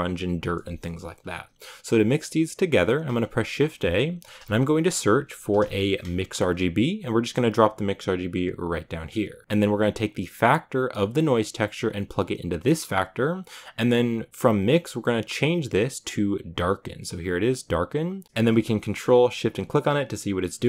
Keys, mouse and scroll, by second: 8.9-17.7 drag, 17.8-19.5 drag.